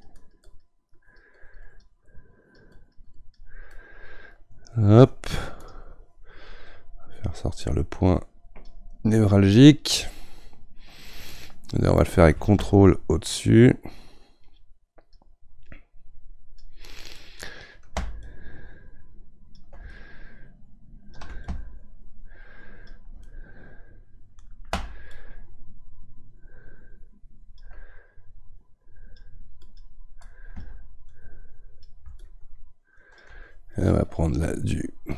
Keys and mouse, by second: 3.7-5.6 middle drag, 5.6-17.2 drag, 17.2-18.2 middle drag, 18.2-23.2 ctrl+drag, 23.2-25.1 middle drag, 25.1-35.1 ctrl+drag.